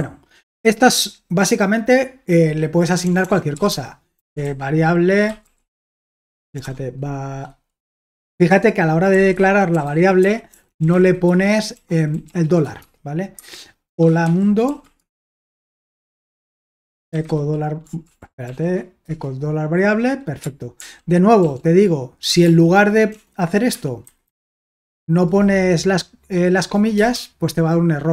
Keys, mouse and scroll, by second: 0.0 a, 3.0-6.5 typing, 9.1-17.7 typing, 18.1 ctrl+p, 18.5 ctrl+p, 19.1 Return, 20.7 ctrl+o, 21.4 ctrl+p, 22.5 ctrl+p, 23.1 BackSpace, 24.0 alt+b, 24.3 alt+b, 24.7 BackSpace, 26.9 Return.